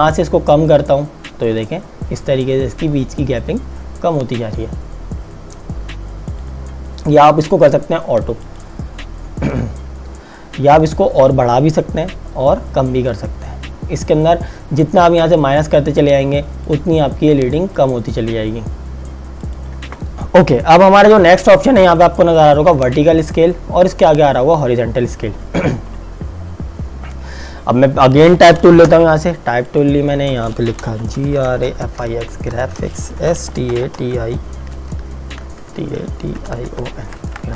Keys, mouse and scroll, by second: 0.5-3.4 scroll down 1, 6.3 click, 11.0-12.7 scroll up 1, 12.7-13.9 scroll down 1, 14.1-16.7 scroll down 1, 16.7 click, 20.1 Delete, 29.1 t, 29.8 click, 30.9-34.8 typing, 36.2-37.3 typing, 37.4 Return.